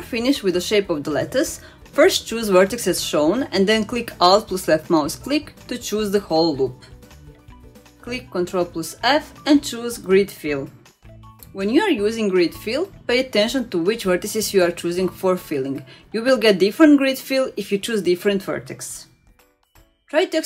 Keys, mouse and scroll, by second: 4.1-4.8 scroll up 1, 7.8 alt+click, 9.2 ctrl+f, 10.7-11.9 middle drag, 13.9 click, 15.4-16.6 middle drag, 19.6 shift+click, 20.2 shift+click.